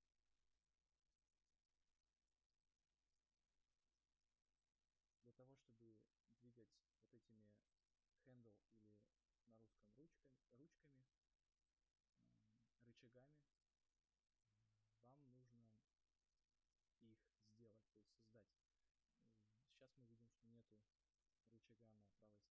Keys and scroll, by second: 9.7 space, 10.5 space, 15.2 ctrl+z, 16.0 ctrl+z.